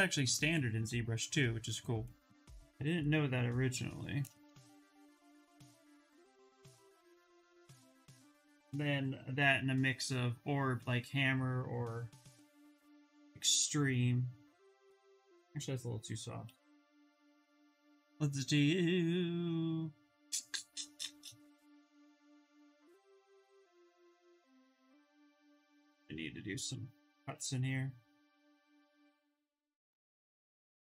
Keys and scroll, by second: 8.6 b, 11.8 s, 16.6 b, 16.9 o, 24.4 ctrl+z, 24.6 s, 26.3 s, 29.6 ctrl+z.